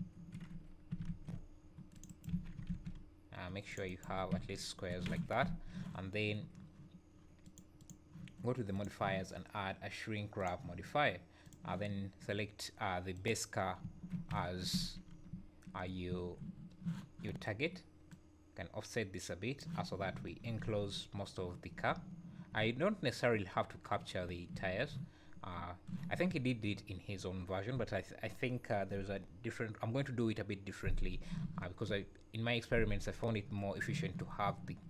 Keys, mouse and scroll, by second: 0.0 `, 1.1 ctrl+r, 2.3 alt+a, 2.6 ctrl+r, 4.1 Tab, 5.0 z, 5.4 `, 7.4 click, 7.8 click, 11.4 click, 13.8-16.1 typing, 15.0 scroll up 4, 15.9 scroll down 3, 18.1 click, 20.6 `, 21.8 `, 25.3-25.9 scroll up 2, 25.3 `.